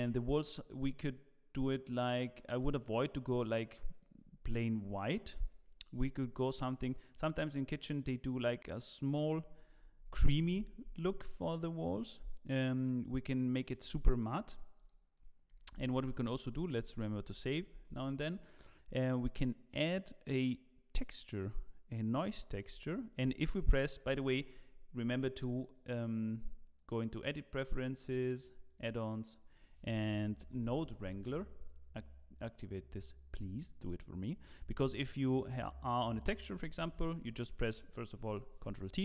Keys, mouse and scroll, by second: 0.4-2.4 scroll down 2, 0.7 middle click, 2.4 click, 5.0 click, 11.5 click, 14.1 click, 14.1 scroll down 4, 14.2 middle click, 14.8 click, 15.6 shift+a, 16.8 ctrl+s, 17.7 shift+a, 25.6 click, 34.7 click, 38.3 ctrl+t, 38.3 click.